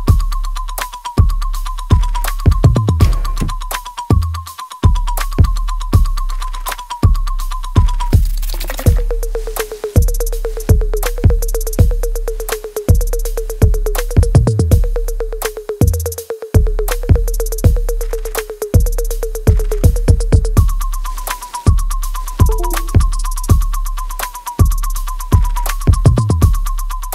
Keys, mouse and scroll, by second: 1.2 click, 2.6 alt+right click, 3.3-5.2 alt+drag, 5.2 alt+right click, 5.6 alt+click, 6.0 alt+middle click, 6.4 alt+right click, 7.9-9.3 drag, 9.3-11.7 drag, 11.7 right click, 12.7 click, 13.2 alt+right click, 13.7 alt+click, 14.6 click, 15.6 alt+right click, 16.0-20.3 alt+drag, 20.7 click, 21.2 alt+click, 21.6 alt+middle click, 22.3 alt+right click, 23.0 click, 23.4 alt+middle click, 24.7-26.5 alt+right drag, 26.5 alt+right click.